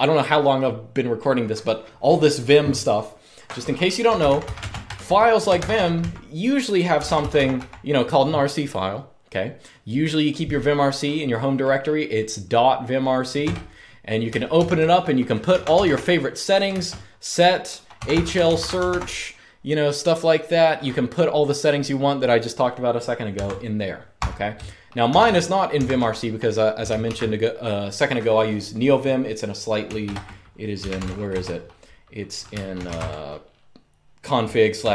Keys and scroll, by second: 3.5-7.7 typing, 13.1 Return, 14.2-19.1 typing, 23.1 Escape, 23.9-25.7 typing, 25.5 Escape, 26.7 super+q, 29.7 super+Return, 30.2-33.1 typing.